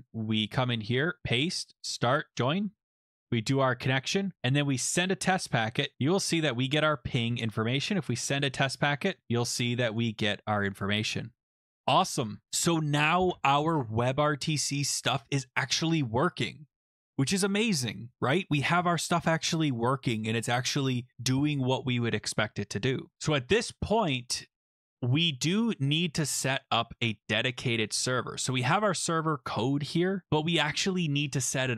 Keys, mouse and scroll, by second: 0.4 click, 1.2 click, 1.2 ctrl+v, 1.8 click, 2.3 click, 3.9 click, 5.0 click, 5.9 click, 8.4 click, 8.6 click, 8.8 click, 8.9-9.2 click, 9.1 click, 10.0 click, 28.6 click, 28.7 click, 29.5 scroll down 6, 30.6 scroll up 2, 30.8-31.7 scroll down 15.